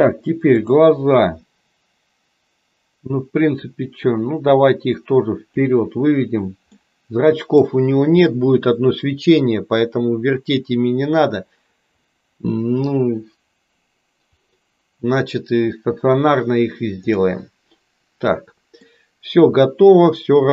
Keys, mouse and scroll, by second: 4.1-5.7 drag, 6.8 middle click, 17.3-18.9 middle drag.